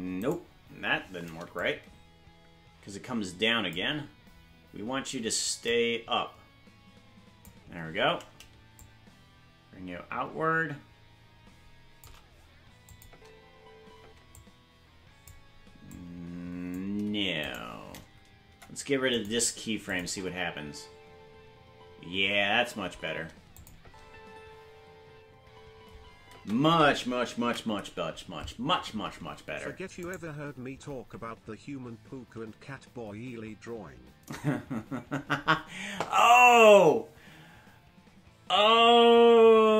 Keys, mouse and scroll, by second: 0.3 right click, 1.6-3.7 drag, 5.7-7.4 drag, 8.7-12.0 shift+drag, 12.9 click, 13.1 space, 14.1 space, 14.3-15.3 drag, 15.9 click, 17.4 right click, 17.9 right click, 18.4 Delete, 19.9 click, 20.0 space, 23.5 space, 23.5 click, 23.8 space, 29.3 ctrl+s, 30.1-31.3 right drag.